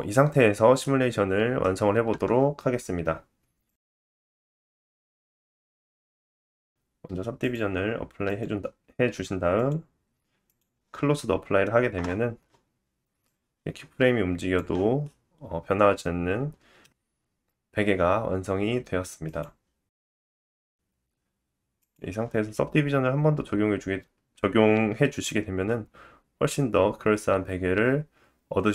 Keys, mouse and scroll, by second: 0.1 middle click, 1.8-4.1 middle drag, 1.8-2.3 scroll down 1, 4.1-17.0 drag, 5.2 middle click, 7.3-17.0 middle drag, 7.3-17.0 right drag, 17.0-17.4 scroll up 2, 17.4 scroll down 2, 17.8 Tab, 18.2 Tab, 19.8 click, 20.1 click, 22.4 middle click, 25.6 middle click.